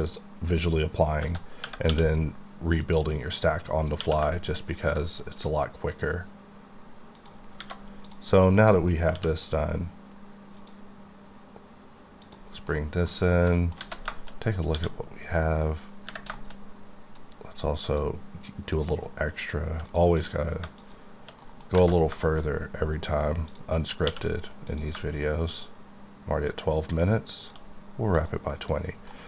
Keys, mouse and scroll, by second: 0.8-1.2 scroll up 1, 1.2 Tab, 1.7 Tab, 1.9 q, 2.9 click, 3.9 click, 4.0 q, 4.8 ctrl+click, 5.6-6.1 ctrl+scroll down 3, 7.6 alt+a, 8.1 click, 8.4-8.7 scroll up 1, 8.7 middle click, 9.2 q, 10.6 click, 12.4 double click, 12.5 scroll down 1, 12.7 middle click, 13.8 alt+z, 14.2 shift+middle click, 14.4-14.7 scroll up 5, 14.7 d, 16.3 shift+d, 16.5 middle click, 16.6-17.2 scroll up 3, 17.2 click, 18.7 click, 20.2 click, 20.8 shift+click, 21.6 middle click, 21.7-22.1 scroll down 2, 21.8 z, 22.3 shift+middle click, 22.5-23.2 scroll up 5, 23.5 click, 24.1 q, 24.7 click, 27.4 shift+click, 28.5-29.1 scroll down 9, 29.1 middle click.